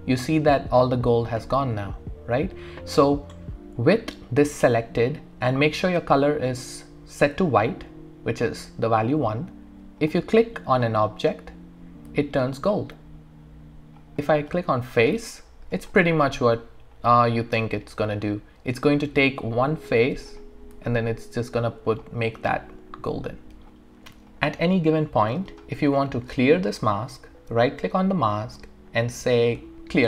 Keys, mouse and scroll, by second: 10.0 click, 12.2-14.5 alt+drag, 15.4 alt+middle click, 15.9 alt+click, 16.6 alt+right click, 17.6 alt+middle click, 20.3 click, 20.9-22.2 alt+drag, 24.1 click, 24.3-27.6 alt+drag, 27.6 right click.